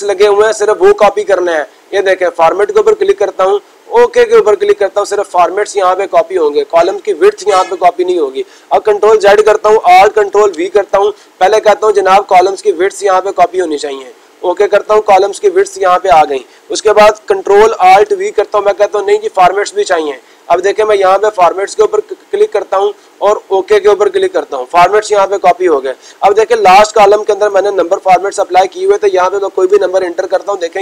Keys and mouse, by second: 2.0-3.0 drag, 3.7-4.7 drag, 13.4 click, 14.8-15.8 drag, 21.1 click, 23.7-24.8 drag, 26.6-27.8 drag.